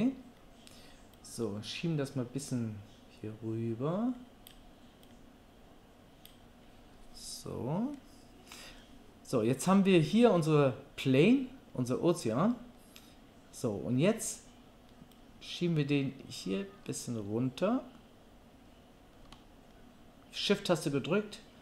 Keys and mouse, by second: 1.2-21.6 drag.